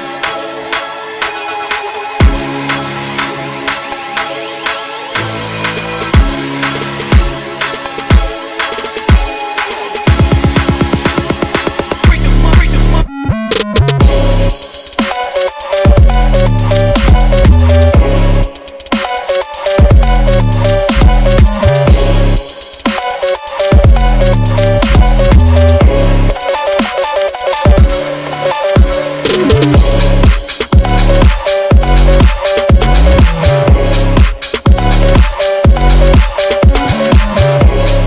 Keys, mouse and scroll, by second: 0.1 ctrl+z, 0.3 r, 1.0 g, 1.5 click, 1.8-2.2 scroll up 1, 2.2 click, 3.1 click, 3.3 click, 3.4 click, 3.6 g, 4.2 click, 4.6 Tab, 4.7 click, 5.0 Tab, 5.6 g, 6.5 click, 7.3 click, 7.4 scroll down 1, 7.5 Tab, 8.7 alt+drag, 9.3 alt+shift+drag, 9.8 alt+shift+click, 10.1 alt+shift+click, 10.5-11.5 alt+shift+drag, 11.5 shift+d, 12.5 click, 12.6 click, 13.2 click, 13.5 Tab, 13.6 click, 13.7 click, 14.4 click, 14.6 click, 14.7 click, 14.9 g, 15.4 g, 15.8 click, 15.9 click, 16.3 click, 16.4 scroll up 3, 16.6 Tab, 16.7 click, 17.0 ctrl+r, 18.6 click, 18.9 ctrl+r, 19.6 click, 20.3-20.7 scroll up 1, 20.7 click, 21.0 shift+click, 21.4 ctrl+b, 22.4 click, 22.5 scroll down 2, 22.7 e, 23.3 click, 23.8 s, 24.2 ctrl+z, 24.4 click, 24.6 scroll down 3, 24.8 click, 25.0 Tab, 25.0 click, 25.1 scroll up 4, 25.3 click, 25.5 Tab, 25.8 3, 26.4 shift+click, 27.4 click, 27.7 2, 27.9 click, 28.2 ctrl+b, 29.2 scroll up 2, 29.5 e, 30.3 ctrl+z, 30.5 ctrl+z, 30.7 ctrl+b, 32.4 scroll up 2, 32.8 shift+click, 33.1 e, 34.0 scroll down 2, 34.1 ctrl+z, 34.4 click, 34.7 e, 35.6 ctrl+z, 35.7 ctrl+z, 35.8 ctrl+z, 36.2 e, 37.2 click.